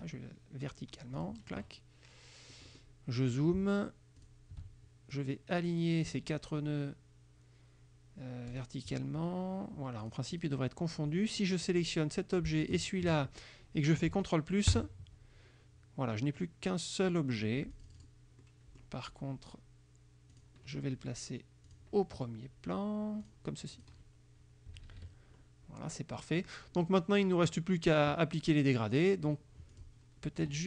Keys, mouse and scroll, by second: 1.3 click, 2.6 click, 4.3 shift+click, 5.2 click, 8.6 click, 10.1 click, 10.5 click, 11.9 click, 12.7 shift+click, 14.8 ctrl+KP_Add, 17.8 click, 18.5 click, 20.4 click, 21.8 click, 23.3 click, 23.8 click, 24.8 KP_Subtract, 26.0 click, 26.9 click, 29.8 click, 30.5 F2.